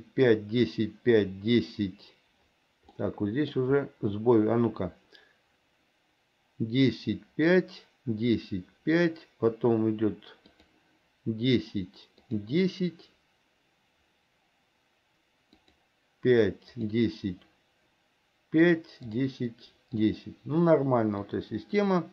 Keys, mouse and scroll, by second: 3.0 middle click, 10.6 click, 12.4 click, 15.7 click, 16.9 click, 18.8 click, 19.1 click, 20.1 click, 21.3-22.1 drag.